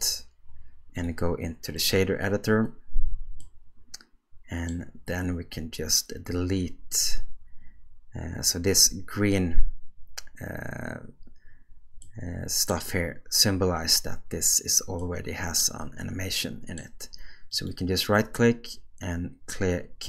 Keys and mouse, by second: 0.9-1.9 drag, 3.5-4.7 middle drag, 12.1 middle click, 15.1 middle click, 16.5 middle click, 17.6-20.0 right drag.